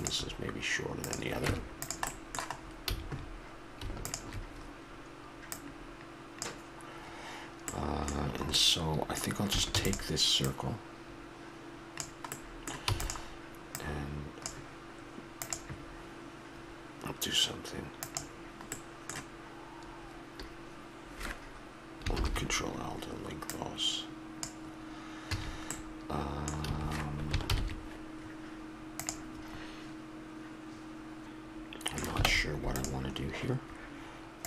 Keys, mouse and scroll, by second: 1.0-1.5 right drag, 1.5 Tab, 2.1 middle click, 2.7 scroll up 1, 2.9 a, 5.8-7.1 drag, 7.6-9.0 middle drag, 9.8 shift+d, 10.5-12.5 drag, 12.8 e, 13.7 click, 18.7-20.5 middle drag, 22.1 ctrl+l, 23.5-25.3 drag, 25.3 a, 26.6 a, 27.5 ctrl+n, 31.2 middle click, 32.3 ctrl+Tab, 33.2 middle click.